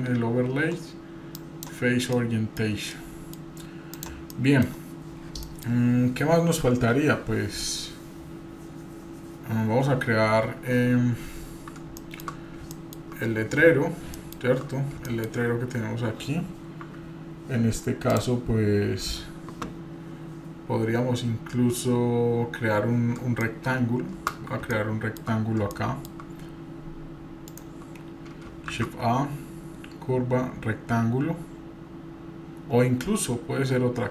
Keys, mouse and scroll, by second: 2.1-2.8 middle drag, 2.5-3.1 scroll down 3, 2.9 middle click, 3.9 click, 4.3 middle drag, 4.7-5.4 scroll down 1, 5.4 middle click, 11.1-11.7 scroll down 3, 12.0 shift+middle click, 12.4 scroll up 1, 12.7 shift+middle click, 13.2-13.6 scroll up 2, 14.1 shift+middle click, 14.1 scroll up 1, 14.7 scroll up 1, 15.1 shift+middle click, 23.4-24.3 middle drag, 24.7-25.3 shift+middle drag, 25.4-25.8 scroll up 2, 25.7-26.2 shift+middle drag, 27.5 shift+middle drag, 27.5 shift+right click, 28.4 scroll up 1, 28.7 shift+a.